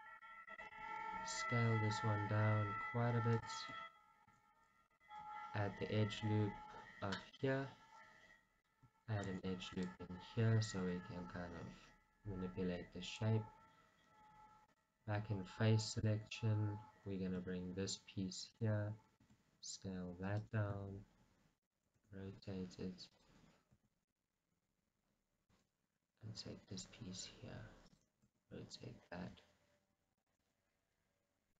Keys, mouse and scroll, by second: 0.0 g, 0.8 s, 3.6 click, 5.7 ctrl+r, 7.5 click, 10.4 right click, 10.9 g, 13.4 click, 16.0 click, 17.7 e, 18.8 click, 19.5 s, 20.7 click, 21.0 g, 21.9 click, 22.1 r, 23.3 click, 24.0 e, 24.4 right click, 25.8 g, 28.2 click, 28.4 r, 30.4 click, 31.3 g.